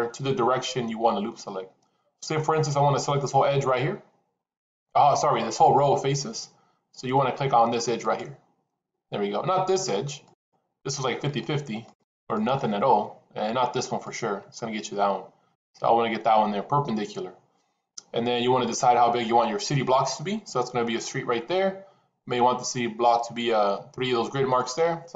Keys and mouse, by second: 10.2 alt+click, 10.7 alt+click, 11.6 alt+click, 11.9 alt+click, 12.1 alt+click, 12.3-13.9 alt+drag.